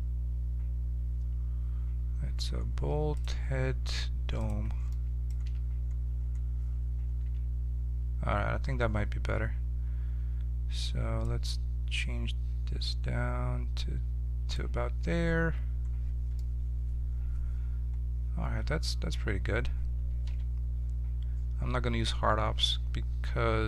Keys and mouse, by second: 3.1-5.0 drag, 5.4 z, 7.2 z, 10.7 middle click, 11.2-14.8 drag, 15.4-20.2 middle drag, 20.2 q.